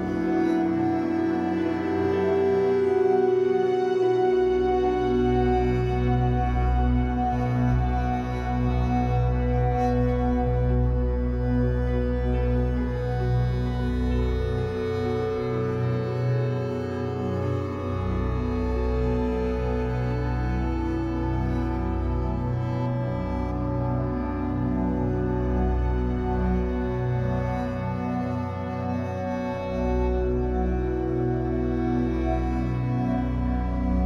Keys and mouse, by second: 0.8 ctrl+s, 1.5 alt+shift+click, 4.5 click, 4.9 click, 5.5 ctrl+alt+click, 6.5 click, 7.9 alt+shift+click, 8.4 ctrl+alt+click, 9.6 typing, 10.6 ctrl+alt+click, 11.6 click, 12.3 click, 14.5 click, 15.2 click, 16.6 click, 19.4 alt+shift+click, 20.1 alt+shift+click, 21.0 click, 22.9 click, 25.5 i, 27.0 Right, 27.1 Right, 27.3 Right, 28.5-29.5 drag, 31.3 Right, 32.7-33.9 drag.